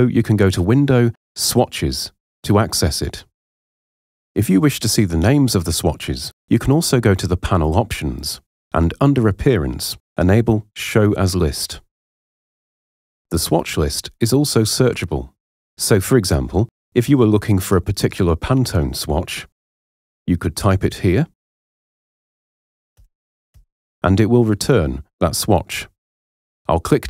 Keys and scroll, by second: 22.1 4, 22.6 1, 23.1 7, 23.5 9.